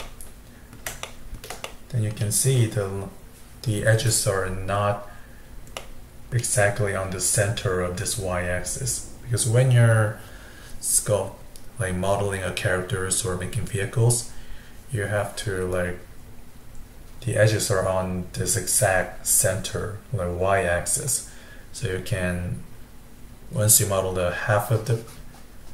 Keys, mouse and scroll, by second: 5.8-8.8 middle drag, 23.9-25.6 scroll down 1, 25.6-25.7 scroll down 1.